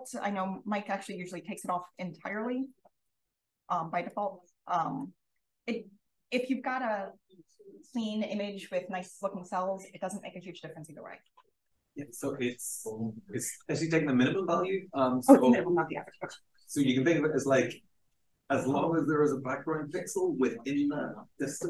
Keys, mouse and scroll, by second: 0.0 drag, 1.1 0, 2.9 click, 4.0 click.